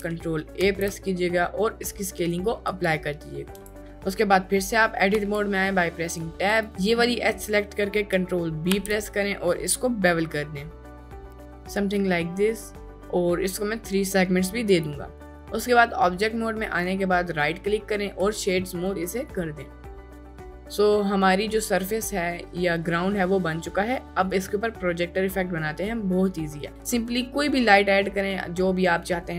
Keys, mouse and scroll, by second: 0.6 ctrl+a, 3.5 Tab, 3.6 Tab, 5.1 Tab, 6.6-7.9 drag, 8.7 ctrl+b, 14.6 click, 15.2 Tab, 16.7 right click, 18.8-19.2 middle drag, 19.5-19.9 middle drag, 20.2 middle drag, 20.7-21.9 middle drag, 22.7-23.1 middle drag, 23.6 middle drag, 24.3 middle drag, 24.9 middle drag, 25.5 middle click, 26.3 middle click, 26.7 shift+a.